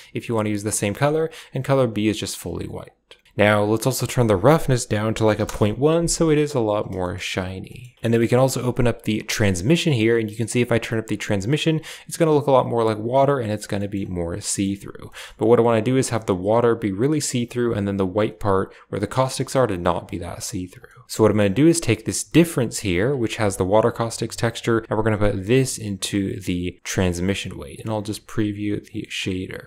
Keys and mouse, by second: 1.1 click, 2.8 click, 4.0-5.4 drag, 7.0 shift+middle click, 7.6 middle click, 8.1 middle click, 9.3 click, 10.4-12.9 drag, 13.7 shift+middle click, 14.4 middle click, 15.0 shift+middle click, 19.1 middle click, 19.6 middle click, 22.2 click, 23.1 ctrl+shift+click, 24.5-26.9 drag, 28.9 middle click.